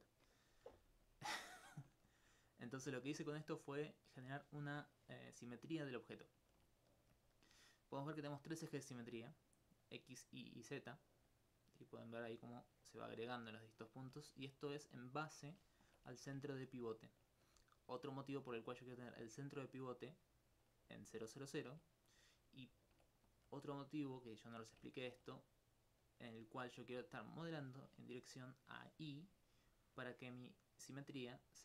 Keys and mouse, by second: 1.1 alt+click, 3.7 alt+click, 5.9 alt+click, 9.4-11.9 drag, 12.6 alt+click, 14.7 alt+click, 14.9 click, 17.3 alt+click, 18.7 alt+click, 29.7 alt+click, 31.1 alt+click.